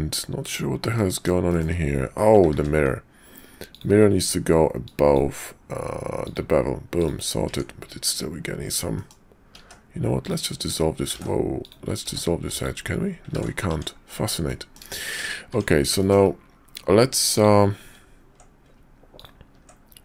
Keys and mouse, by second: 0.9 click, 1.5 shift+click, 2.5 ctrl+`, 7.5 Tab, 8.9 click, 9.5 x, 11.2 ctrl+z, 11.6 click, 12.0 x, 13.3 ctrl+z, 13.7 Tab, 14.4 click, 15.0 shift+click, 15.5 Tab, 16.0 shift+click, 17.3 click, 19.1 ctrl+click.